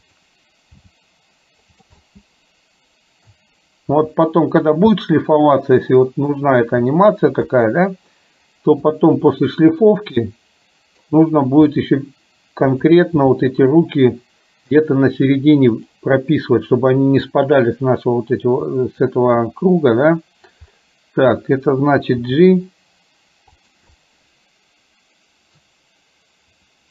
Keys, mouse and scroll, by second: 1.0 g, 2.2-3.5 middle drag, 4.1 r, 5.0-6.3 middle drag, 6.6 r, 9.1 click, 9.5-11.1 middle drag, 11.7 r, 13.3 g, 18.8-20.6 middle drag, 20.6 scroll down 1, 22.3 g, 24.0-25.7 middle drag.